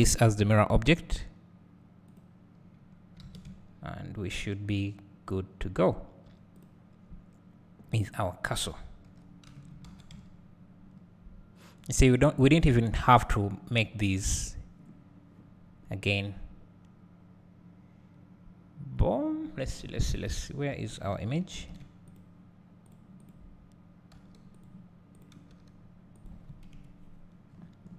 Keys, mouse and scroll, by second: 3.2 alt+a, 3.4 `, 6.6 click, 9.1 h, 20.4 scroll down 1, 20.7 `, 21.5 alt+h, 22.1 click, 23.3 click, 24.1 g, 25.2 click, 25.5 g, 26.3 click, 26.7 KP_Decimal, 27.5 middle click, 27.5 scroll.